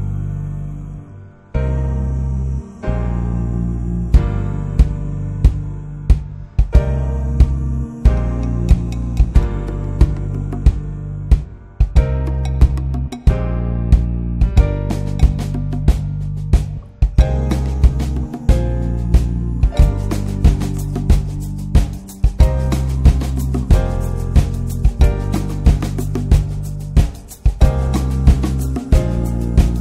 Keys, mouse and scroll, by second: 2.2 click, 3.9 click, 5.9 click, 6.4-8.0 drag, 9.0 middle click, 9.1-9.4 scroll up 1, 9.4 ctrl+s, 9.6 shift+middle click, 10.0 click, 10.5 click, 10.8-11.5 middle drag, 11.5 shift+d, 12.1 alt+middle drag, 13.0-13.7 drag, 13.7-14.1 scroll up 4, 13.9 shift+middle click, 14.1 s, 14.8 alt+middle click, 15.0-15.6 shift+middle drag, 15.6 click, 17.1 scroll up 2, 17.4 s, 18.5 click, 19.3 alt+middle click, 19.9-20.3 shift+middle drag, 20.3 click, 21.3 alt+middle click, 21.6-22.7 shift+middle drag, 22.7 shift+d, 23.6 r, 24.6 s, 25.5-26.1 drag, 26.1-26.5 middle drag, 26.5 s, 27.5 alt+middle drag, 28.4 alt+middle click, 28.8 shift+middle click, 29.1 r.